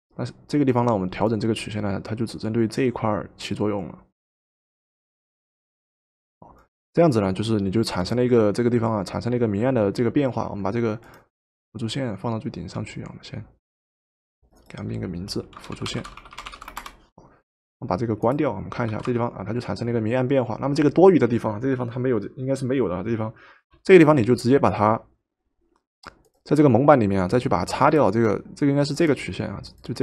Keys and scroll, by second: 15.5-17.1 typing, 18.9 v.